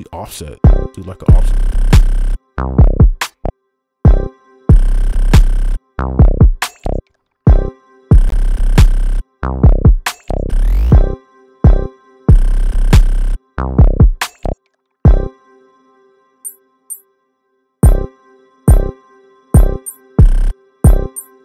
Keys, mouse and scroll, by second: 0.6 right click, 3.5 space, 7.0 space, 7.5 space, 8.3 scroll down 1, 11.4 space, 11.6 space, 12.7-13.7 scroll down 1, 14.8 space, 15.0 space, 16.3 space, 16.4 ctrl+click, 18.2 space, 19.2-21.4 typing.